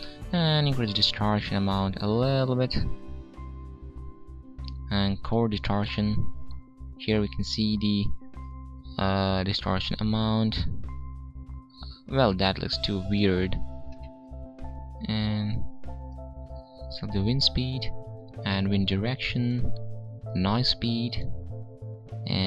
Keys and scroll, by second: 13.8 ctrl+z.